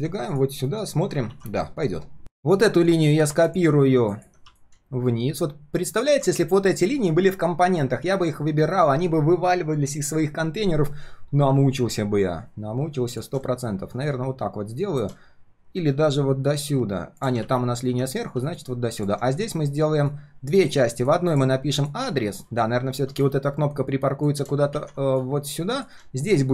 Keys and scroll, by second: 0.6 ctrl+shift+4, 1.3 ctrl+s, 17.4 ctrl+z, 24.7 ctrl+z.